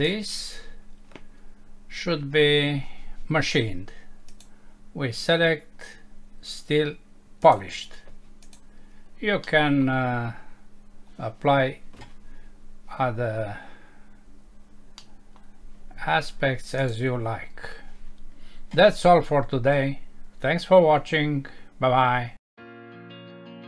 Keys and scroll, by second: 9.4 F6, 15.0 F6.